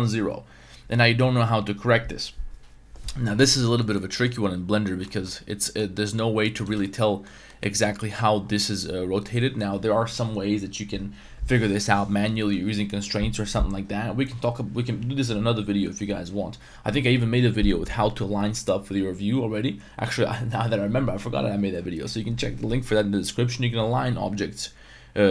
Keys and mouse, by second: 3.8 middle click, 4.3-5.1 middle drag, 5.1 Tab, 5.2-5.8 middle drag, 6.0 r, 6.5 right click, 6.8 Tab, 6.8-7.2 middle drag, 7.5 middle click, 7.8 Tab, 8.0 middle click.